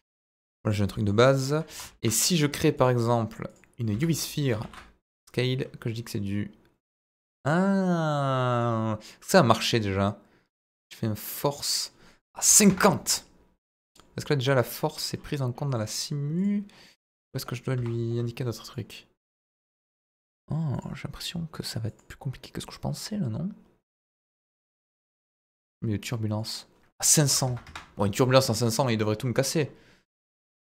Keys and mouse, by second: 0.1 click, 0.9 middle click, 1.6 KP_1, 1.8 shift+a, 3.9 s, 4.4 click, 4.6 ctrl+a, 8.5 click, 11.6-13.0 drag, 13.9 click, 15.8 click, 16.4-17.8 drag, 18.7-19.9 drag, 20.7 click, 21.9-25.7 drag, 26.3-27.9 drag, 27.4 KP_0, 30.6 click.